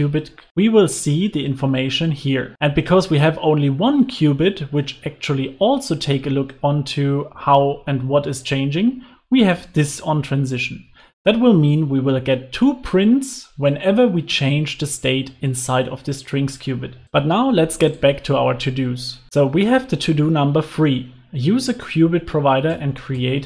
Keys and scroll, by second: 16.9 super+s.